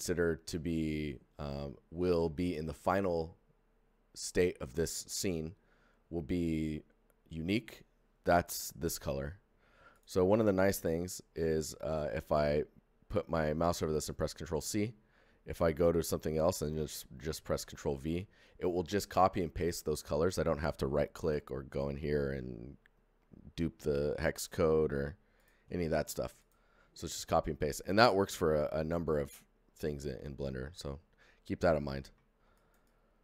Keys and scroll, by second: 14.5 ctrl+c, 15.5 c, 17.6 ctrl+v, 18.8 ctrl+z, 21.2 z.